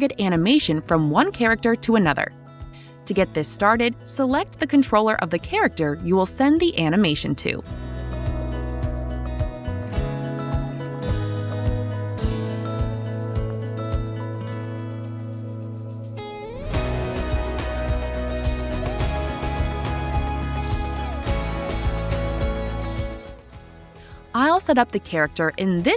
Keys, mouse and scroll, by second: 2.5 click, 5.5 click, 9.7 Left, 10.8 space, 13.2-13.7 typing, 14.9 typing, 15.6 Insert, 17.0 Delete, 17.9 g, 20.4 click, 22.4 click, 23.4 click.